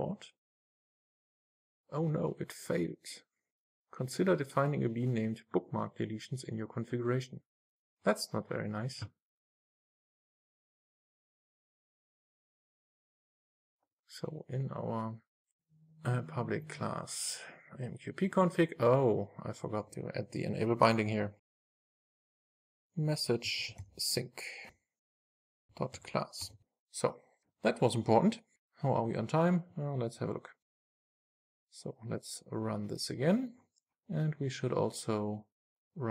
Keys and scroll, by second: 24.9 Return, 26.5 super+s, 31.4 ctrl+shift+r.